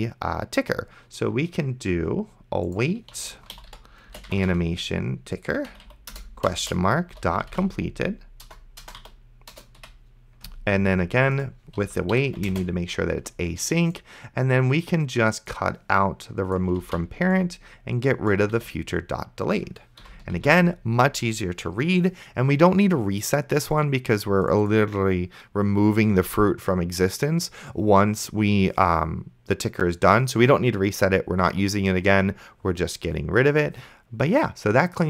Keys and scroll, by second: 2.9-5.2 typing, 5.7 Down, 6.1 Return, 6.7-9.8 typing, 9.5 Return, 11.4-12.8 typing, 17.1 ctrl+x, 18.8 ctrl+v, 20.0 ;, 20.6 ctrl+s.